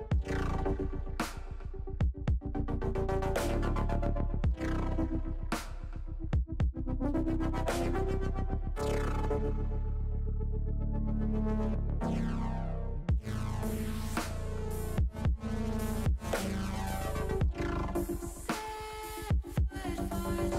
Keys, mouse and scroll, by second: 0.2 l, 1.3 click, 3.3 KP_1, 4.9 middle click, 5.8 middle click, 6.5 shift+middle click, 7.7 click, 9.6 click, 10.2 click, 11.4 middle click, 12.7 click, 14.7 click, 16.2 click, 17.1 click, 17.7 shift+click, 18.1 middle click, 18.9-20.1 middle drag.